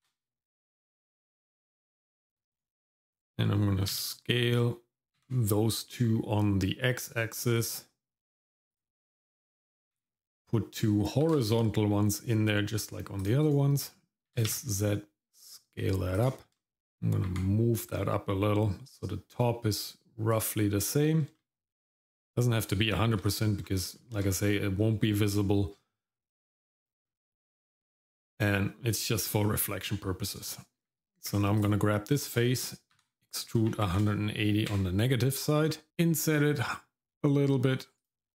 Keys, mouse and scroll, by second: 0.0 ctrl+r, 3.9 s, 11.2 ctrl+r, 14.3 s, 16.6 shift+middle click, 17.3 g, 21.4-23.2 shift+middle drag, 23.6 scroll down 2, 23.9 shift+middle click, 24.4 middle click, 24.8 scroll up 1, 26.6 shift+middle click, 27.1-27.5 scroll up 2, 30.8 Tab, 31.6 click, 32.9 e, 35.9 i.